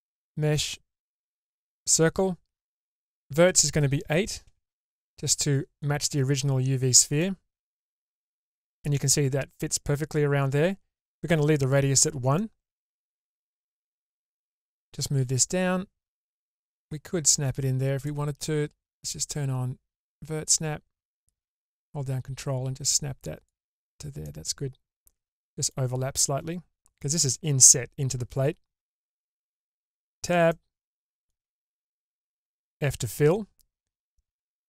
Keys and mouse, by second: 3.4-6.1 drag, 7.2-8.5 middle drag, 13.2-13.8 middle drag, 13.8 ctrl+z, 14.8-18.0 drag, 19.0-20.1 drag, 21.2-23.4 drag, 24.2-25.6 middle drag, 29.8 Tab, 30.4 middle click, 32.2 f.